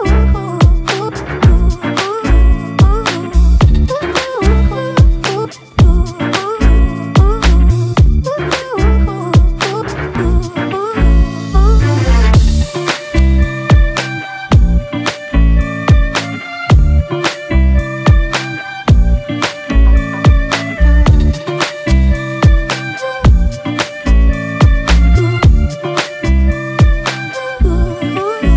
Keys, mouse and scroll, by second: 2.4 shift+click, 3.0 right click, 6.0 double click, 25.9 alt+right click, 27.4 ctrl+click, 28.3 right click.